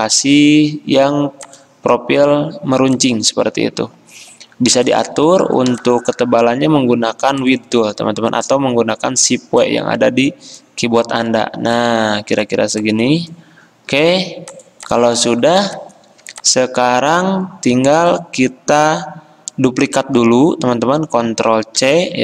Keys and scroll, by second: 21.9 ctrl+c.